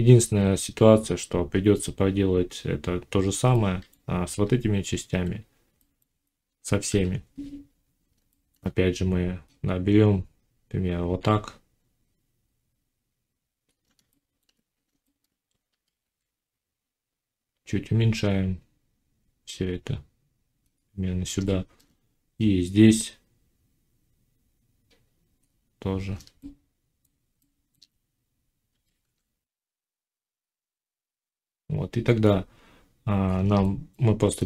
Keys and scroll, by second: 4.3 z, 6.7 7, 15.6 g, 28.6 g.